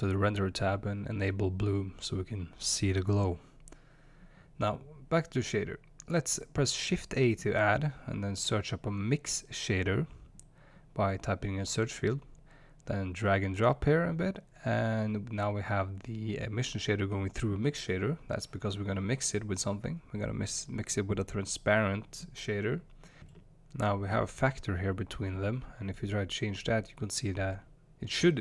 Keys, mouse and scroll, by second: 1.2 click, 3.7-9.8 middle drag, 3.7-7.3 scroll down 2, 7.3-9.8 scroll down 1, 9.8 click, 12.0-12.9 drag, 15.0 click, 16.0 click, 25.8-28.4 drag.